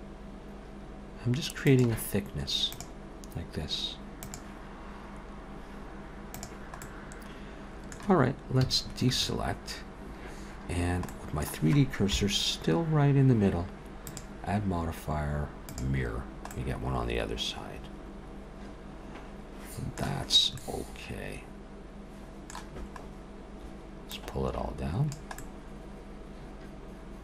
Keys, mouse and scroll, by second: 6.8 middle click, 8.6 a, 9.2 Tab, 10.8 scroll down 1, 11.1 middle click, 12.1 KP_7, 14.0 click, 16.4 middle click, 20.3 scroll up 2, 20.6 middle click, 23.1-23.4 scroll down 1, 24.1 click, 25.4 middle click.